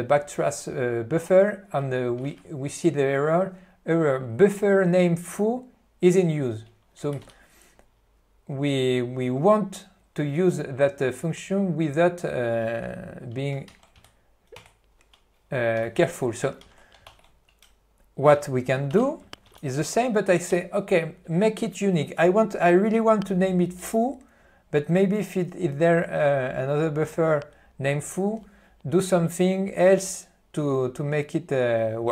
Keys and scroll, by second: 2.4 ctrl+n, 7.3 ctrl+g, 13.8 alt+u, 15.8 q, 16.7 alt+:, 18.8-20.2 typing.